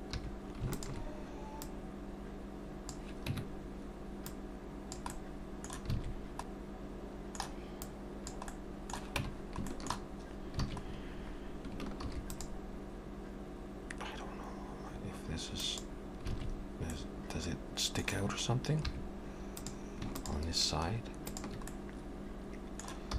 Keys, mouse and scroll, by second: 0.0 2, 0.7 alt+shift+click, 1.6 click, 3.3 Tab, 4.3 click, 5.1 middle click, 6.0 alt+a, 6.5 click, 6.5 middle click, 7.9 click, 8.5 middle click, 9.2 Tab, 9.7 shift+middle click, 10.7 alt+a, 10.8-11.8 scroll up 2, 11.8 scroll up 1, 12.0 ctrl+r, 16.3 alt+a, 16.9 middle click, 18.8 3, 19.5 click, 20.2 shift+click, 21.6 click, 21.7 middle click.